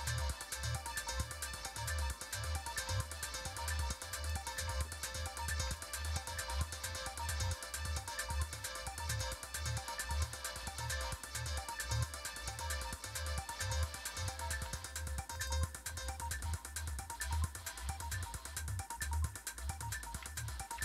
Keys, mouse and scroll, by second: 0.5-1.5 scroll down 1, 1.5-2.7 scroll down 1, 2.7-4.2 scroll down 1, 4.2 click, 5.7 ctrl+v, 9.2 click, 15.4 click.